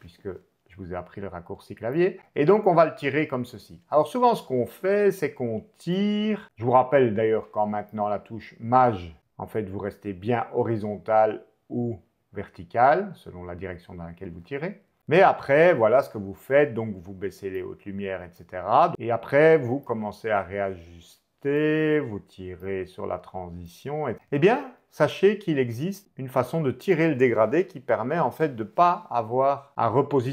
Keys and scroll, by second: 1.5 shift+m, 25.0 super+z.